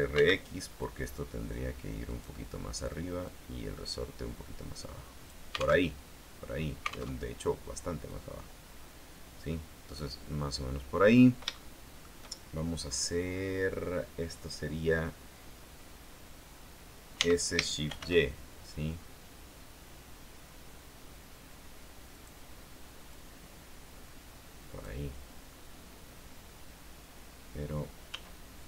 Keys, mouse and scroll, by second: 0.3 x, 2.2 click, 3.4-5.6 drag, 6.0 alt+Tab, 7.3 alt+Tab, 8.2-10.4 drag, 10.3 scroll down 2, 11.3-11.6 scroll up 1, 11.6 shift+middle click, 17.3 s, 18.0 shift+y, 22.3 click, 23.2-25.2 drag, 28.2 s.